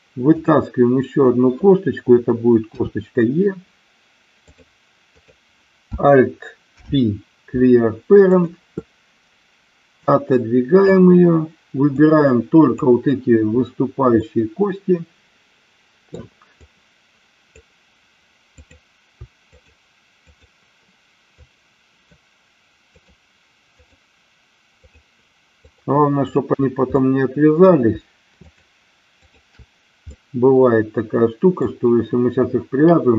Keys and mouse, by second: 0.3 click, 2.8 e, 4.4 click, 6.8 alt+p, 10.1 click, 12.0 click, 14.3-16.1 middle drag, 16.5-17.6 drag, 18.5 click, 19.4 shift+click, 21.4 shift+click, 22.9 shift+click, 23.6 shift+click, 24.9 shift+click, 25.6 shift+click, 26.1 shift+click, 26.9 middle click, 29.1 shift+click, 30.1-31.6 middle drag.